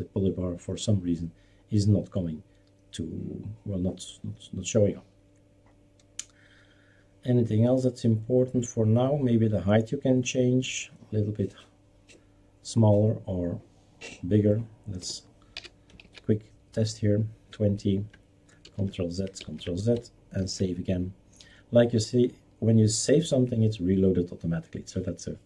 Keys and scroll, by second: 15.0-15.5 typing, 16.0 ctrl+s, 18.6 ctrl+z, 19.4 ctrl+z, 20.4 ctrl+s.